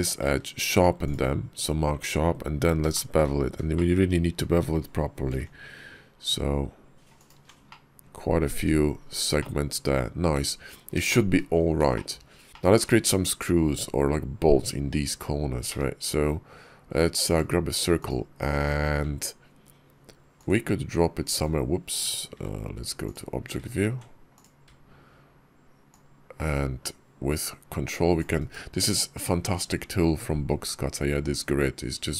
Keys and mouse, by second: 0.1 q, 2.8 shift+click, 3.6 shift+click, 5.0 ctrl+b, 7.5 click, 8.4 Tab, 9.2 click, 10.2 `, 10.9 shift+drag, 11.8 shift+click, 12.5 shift+drag, 15.5 d, 20.2-21.3 ctrl+drag, 22.2 shift+v, 24.2 click, 25.8-28.5 ctrl+drag.